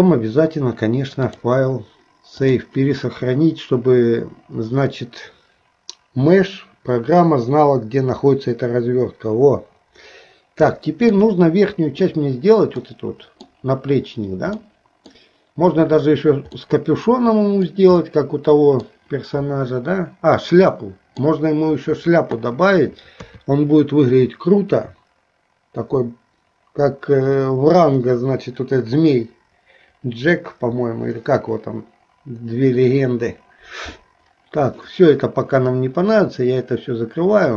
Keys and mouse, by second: 2.6 click, 11.0 shift+middle click, 12.9 middle click, 14.7-19.0 middle drag, 20.8 middle click.